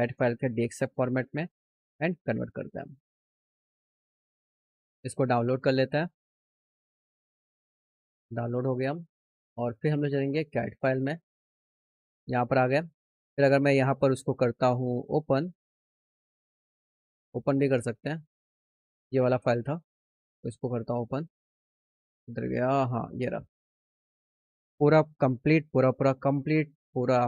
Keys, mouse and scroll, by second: 0.3 click, 1.9 click, 4.7 click, 7.8 click, 9.7 click, 10.8 click, 11.6 click, 13.8 click, 15.2 click, 18.0 click, 18.7 click, 19.1 click, 20.3 click, 21.8 middle click.